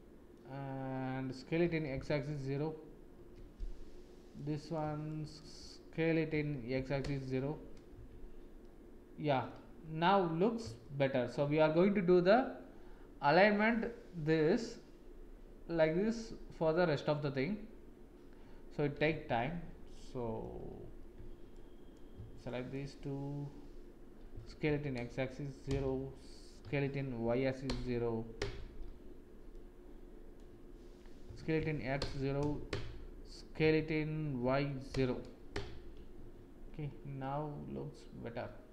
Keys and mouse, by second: 1.6 s, 4.3 click, 5.1 shift+click, 6.2 s, 8.0 Tab, 8.6-9.3 drag, 9.3 middle click, 10.8 shift+middle click, 11.3 shift+click, 19.1 Tab, 19.9 click, 22.5 shift+click, 24.3 s, 26.6 s, 29.5 click, 31.2 s, 33.6 s, 36.3 Tab, 37.1 middle click, 37.3 click, 37.4 middle click, 37.5-38.5 drag, 37.7 middle click, 38.5-38.7 middle drag.